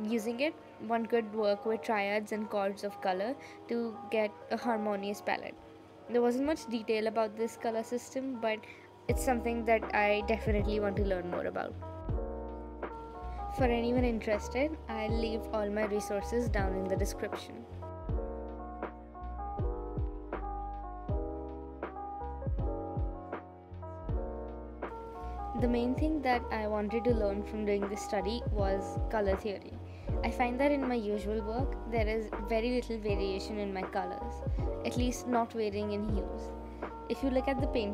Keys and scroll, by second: 8.8 space.